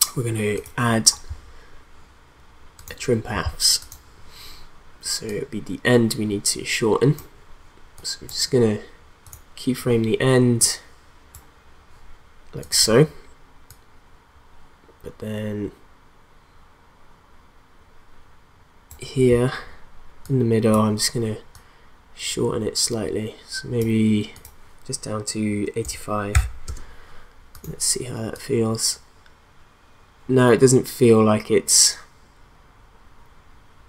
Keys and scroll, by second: 25.8 8, 26.4 5, 26.7 Return.